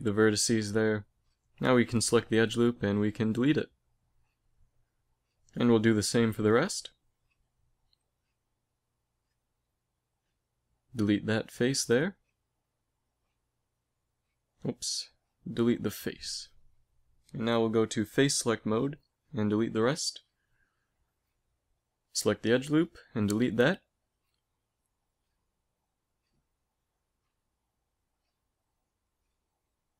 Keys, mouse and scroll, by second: 0.5 z, 1.6-3.3 right drag, 2.3 x, 4.3 a, 5.4 z, 8.4-11.8 right drag, 12.6 x, 15.4 ctrl+z, 15.6 x, 17.5 ctrl+Tab, 19.0 right click, 19.8 x, 21.0 right click, 21.2 ctrl+Tab, 22.3-23.5 right drag, 23.2 x, 23.5 click, 24.3 z, 26.9 middle click, 27.7 z, 28.5 ctrl+Tab, 29.8-29.9 right drag.